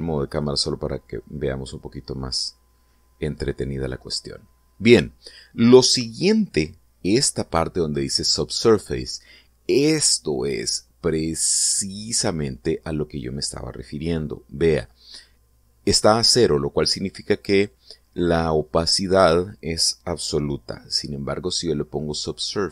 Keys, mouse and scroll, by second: 0.2 scroll down 2, 0.7-1.2 shift+middle drag, 1.3-3.0 shift+middle drag, 3.5-4.7 middle drag, 22.1-22.7 drag.